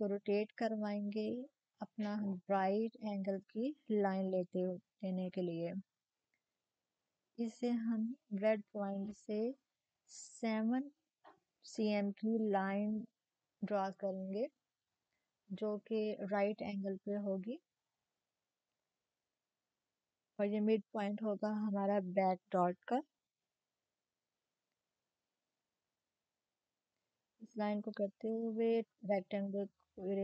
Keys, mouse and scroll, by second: 3.5-4.4 typing, 4.4-7.2 drag, 10.3-12.0 drag, 10.3 typing, 13.2 click, 16.3-18.0 drag, 18.0 7, 24.7-26.4 drag, 27.1-30.2 drag.